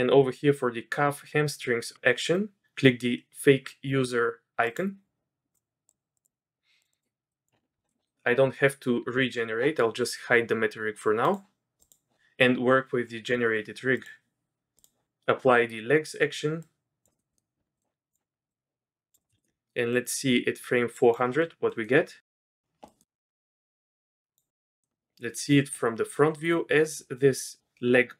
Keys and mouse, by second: 4.6-5.9 drag, 6.2-6.5 drag, 7.3 click, 14.0 click, 16.6-17.0 drag, 17.1 click, 17.3 click, 17.8 click, 18.1 click, 18.5 click, 19.2 click, 19.4 ctrl+click, 19.9-21.1 drag, 21.4 drag, 21.7 click, 22.2 drag, 22.8 click, 23.4-24.4 drag, 24.5 shift+drag.